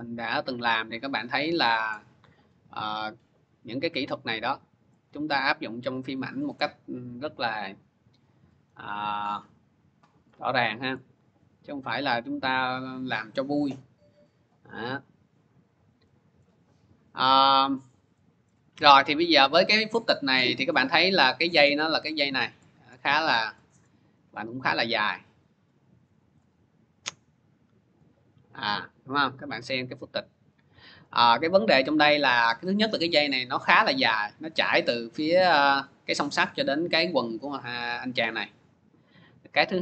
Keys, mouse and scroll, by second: 0.8 click, 0.8 scroll, 1.8-2.1 scroll, 3.3 click, 4.9 click, 6.1 click, 7.7 click, 8.9 click, 9.1 click, 11.9 click, 14.7 click, 16.3 scroll, 17.1 scroll, 18.3-20.1 scroll, 21.2 scroll, 23.7 scroll up 3, 23.9-24.6 scroll down 1, 26.2 click, 27.8 click, 32.3 click.